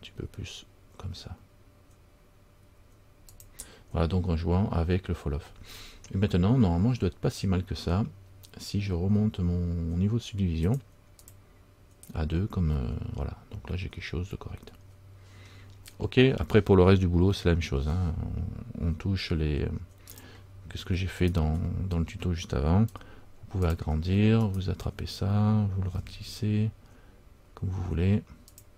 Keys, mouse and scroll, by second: 6.0 middle click, 6.0-6.3 scroll up 1, 10.8 click, 11.4 click, 12.9 scroll up 1, 13.0 middle click, 15.6-16.0 scroll down 1, 17.5-19.0 scroll up 2, 20.2 click, 21.3 alt+right click, 23.0 s, 24.6 alt+right click, 26.1 s.